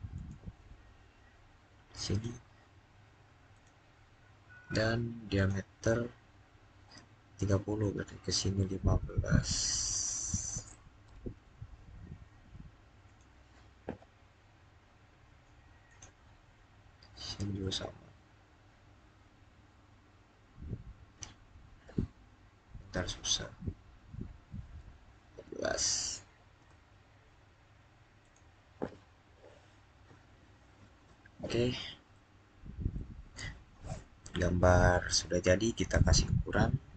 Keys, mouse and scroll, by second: 9.6 click, 10.0-10.7 typing, 10.8 Return, 12.9 click, 15.7 click, 22.9 click, 24.6-25.0 scroll up 1, 25.3-26.0 typing, 26.4 Return, 28.0 click, 29.7-30.3 scroll down 1, 32.0 middle click, 35.0 scroll down 2, 35.8-36.9 middle drag.